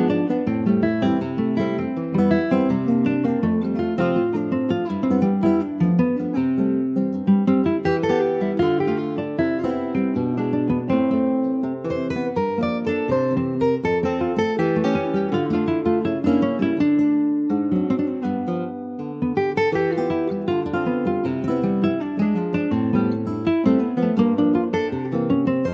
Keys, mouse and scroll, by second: 0.3 3, 0.5 click, 1.1 shift+middle click, 1.9 shift+click, 2.3 scroll down 2, 2.5-6.6 shift+middle drag, 6.6 shift+click, 7.1 shift+middle click, 7.7 shift+click, 8.1-9.7 shift+middle drag, 9.7-10.4 scroll up 2, 10.4 shift+click, 10.8 shift+click, 11.7 shift+click, 12.3-13.9 middle drag, 13.9 shift+click, 14.3 shift+click, 15.0 shift+click, 15.5 shift+middle click, 16.0 shift+click, 16.7-17.4 scroll down 1, 17.6-18.7 middle drag, 18.7 shift+click, 19.1-20.8 middle drag, 21.1 scroll down 2, 21.4 shift+middle click, 22.7 shift+middle click, 23.0-24.3 shift+scroll up 4, 23.2 middle click, 23.7 ctrl+s, 24.3 shift+middle click, 24.5-24.9 shift+scroll up 2, 24.9 middle click, 25.2-25.7 scroll up 1.